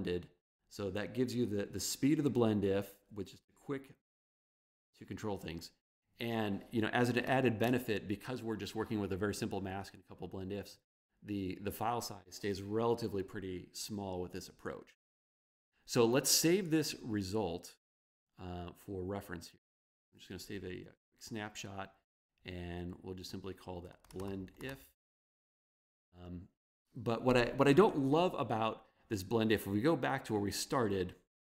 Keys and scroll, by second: 23.8-25.5 typing.